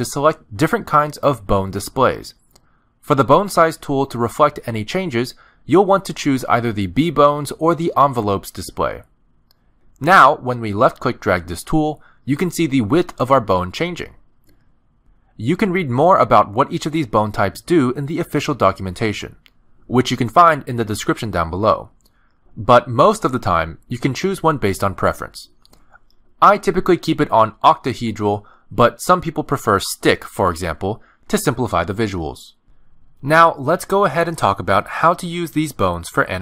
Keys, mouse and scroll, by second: 8.5 middle click, 9.4 click, 16.3 click, 17.9 click, 23.6 click, 28.1 click, 30.6 middle click, 31.3-31.7 scroll down 2, 32.6 click, 34.8 middle click.